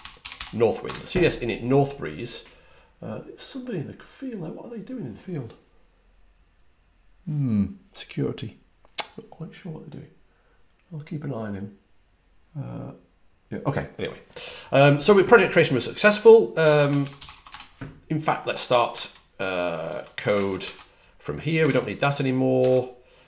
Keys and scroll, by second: 0.0-0.8 typing, 16.3-17.6 typing, 19.8 super+Tab, 20.6 super+Tab, 21.6 super+w, 22.5 super+Tab.